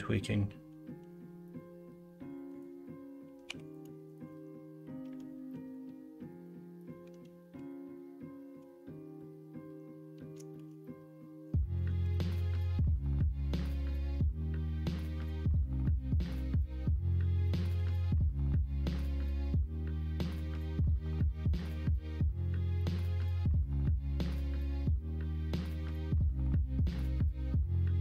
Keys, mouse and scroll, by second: 3.4 2, 10.5 shift+d, 11.9 ctrl+z, 17.7 e, 25.5 1.